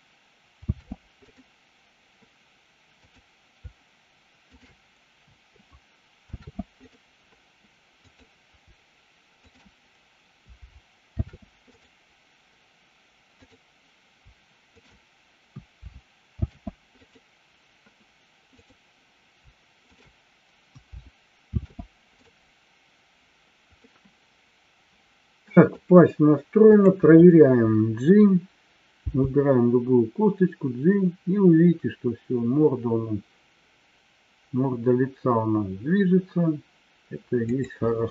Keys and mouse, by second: 0.4 ctrl+shift+c, 3.0 click, 6.2 ctrl+shift+c, 8.1-8.7 drag, 9.3 shift+click, 11.1 ctrl+shift+c, 14.7 shift+click, 16.3 ctrl+shift+c, 19.8 shift+click, 21.4 ctrl+shift+c, 23.8-25.8 middle drag, 37.8 click.